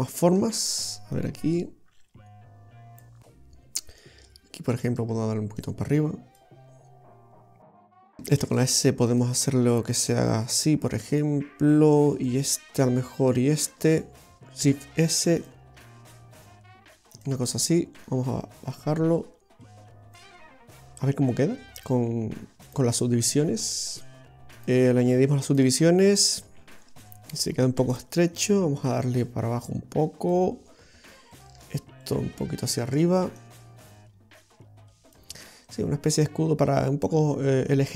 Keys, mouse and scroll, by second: 0.1 shift+right click, 1.2 click, 3.9 right click, 4.8 shift+right click, 5.6 click, 7.6 shift+right click, 8.5 shift+s, 9.6 s, 12.2 right click, 13.6 shift+right click, 14.7 shift+s, 15.6 s, 18.0 right click, 18.8 click, 20.9 scroll down 2, 22.7 click, 23.6 click, 24.6 click, 26.3-26.6 scroll up 1, 29.4 click, 31.4 right click, 32.1 shift+right click, 32.7 shift+right click, 33.4 click, 35.8-36.3 scroll down 2, 36.3 middle click.